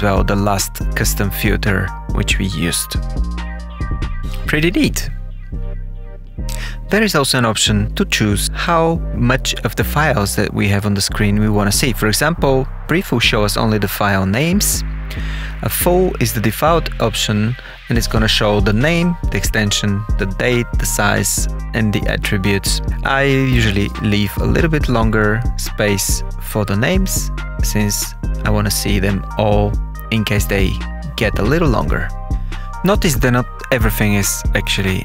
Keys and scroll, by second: 1.9 ctrl+F11, 5.0 ctrl+F12.